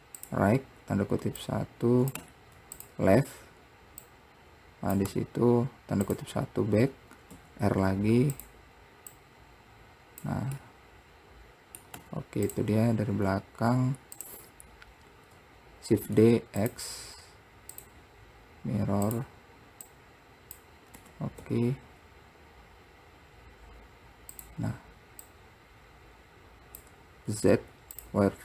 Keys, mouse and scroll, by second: 1.6 click, 4.2 click, 6.9-7.5 scroll up 2, 7.5 s, 9.3 click, 10.8-12.1 middle drag, 15.1-16.1 scroll down 1, 16.1 shift+d, 17.9-20.1 drag, 21.2 t, 25.5-27.5 drag, 27.5 z.